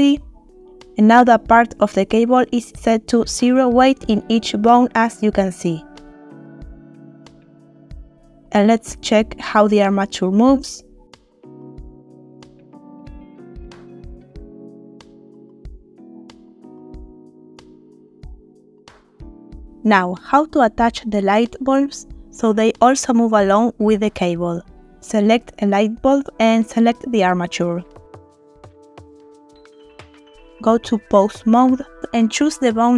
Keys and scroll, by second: 11.8 r, 12.2 Escape, 12.8 r, 13.2 Escape, 13.7 r, 14.1 Escape, 14.6 r, 15.2 Escape, 15.8 r, 16.2 Escape, 16.7 r, 17.2 Escape, 17.8 r, 18.2 Escape, 18.8 r, 19.5 Escape.